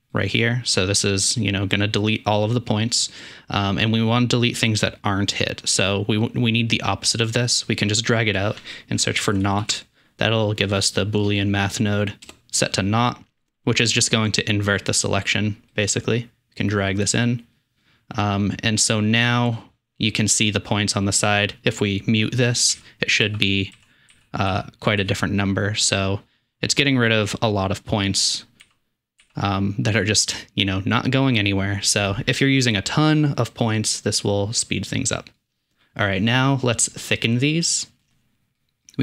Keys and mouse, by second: 0.2 typing, 6.2-14.9 drag, 14.8 typing, 15.7-16.9 drag, 22.8-25.1 typing, 28.4 click, 28.7 m, 29.3 m, 35.4 click, 36.7 middle click, 36.8 drag.